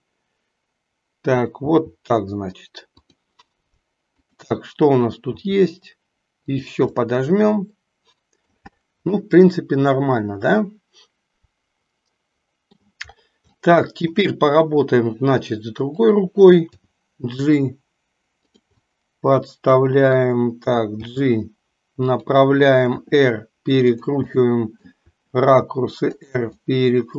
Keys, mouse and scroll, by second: 0.0-1.3 middle drag, 1.7 r, 5.3 r, 7.0-8.5 middle drag, 9.3-13.0 middle drag, 13.5-14.3 shift+middle drag, 16.0 click, 16.9 g, 18.8-20.2 middle drag, 21.0 g, 23.0 r, 24.4 middle click, 26.3 r, 26.6-27.1 middle drag.